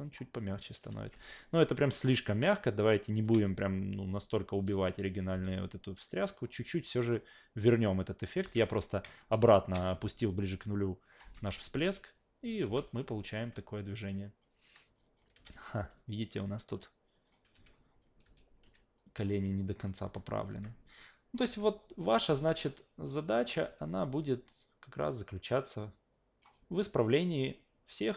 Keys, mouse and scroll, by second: 0.0 click, 0.9 alt+v, 1.8 click, 2.6-3.1 drag, 3.2 w, 3.4-4.4 shift+middle drag, 5.1 click, 5.3 alt+v, 6.3 click, 7.8 click, 9.1 shift+middle click, 10.0 ctrl+z, 11.0 click, 12.6 alt+v, 12.9 click, 13.2-14.4 alt+drag, 14.6 alt+right drag, 15.0 alt+click, 15.3 q, 15.6 click, 16.0 alt+click, 17.2 click, 17.5 a, 18.2 w, 19.0-19.8 drag, 20.0 s, 20.5 s, 21.0-21.3 drag, 21.5 alt+v, 22.3 alt+v, 22.9 click, 23.8 alt+click, 25.2-26.4 drag, 26.5-27.1 alt+drag, 27.9-28.1 drag.